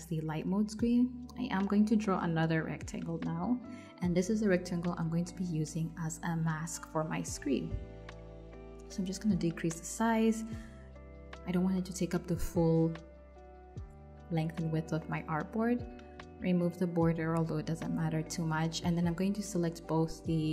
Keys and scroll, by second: 6.3 v, 19.7-20.5 typing.